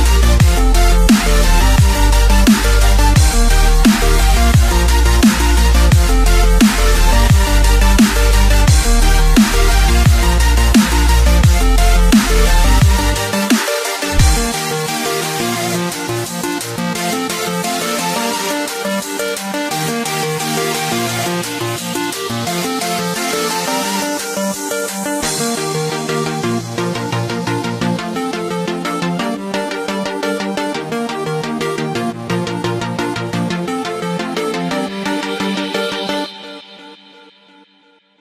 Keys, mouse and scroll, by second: 1.0 scroll up 1, 1.2-1.9 scroll down 1, 2.1 click, 2.6 x, 3.3-14.0 middle drag, 14.0 click, 15.9 click, 16.4-17.6 middle drag, 17.6-17.9 scroll up 2, 21.8 click, 24.9-30.1 drag, 36.0-38.2 drag.